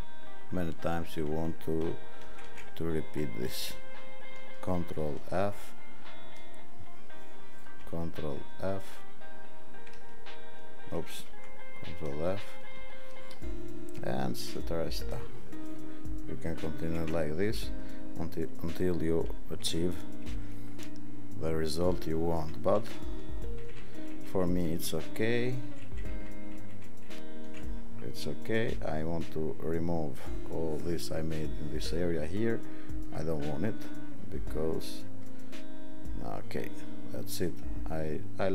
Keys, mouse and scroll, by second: 2.2 ctrl+alt+d, 4.9 ctrl+alt+f, 8.0 ctrl+alt+d, 9.9 ctrl+alt+d, 11.2 ctrl+alt+f, 16.8 ctrl+alt+f, 19.6 ctrl+-, 20.3 ctrl+-, 20.7 ctrl+-, 23.6 ctrl+z, 23.8 ctrl+z, 24.0 ctrl+z, 24.2 ctrl+z, 24.3 ctrl+z, 24.5 ctrl+z, 24.7 ctrl+z, 24.9 ctrl+z, 25.2 ctrl+z, 25.5 ctrl+z, 25.6 ctrl+z, 25.9 ctrl+z, 26.1 ctrl+z, 26.3 ctrl+z, 26.5 ctrl+z, 26.8 ctrl+z.